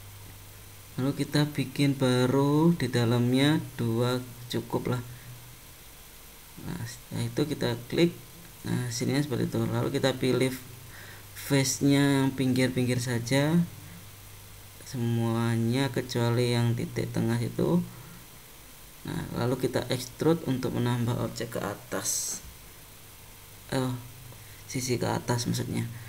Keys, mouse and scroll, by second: 0.4 ctrl+r, 6.7 click, 8.2 click, 9.2 shift+click, 9.7 click, 11.8 ctrl+click, 12.7 shift+click, 13.1 ctrl+click, 13.6 ctrl+click, 14.6 shift+click, 15.1 shift+click, 16.0 shift+click, 16.5 shift+click, 17.3 shift+click, 18.0 shift+click, 18.7 shift+click, 21.3 e.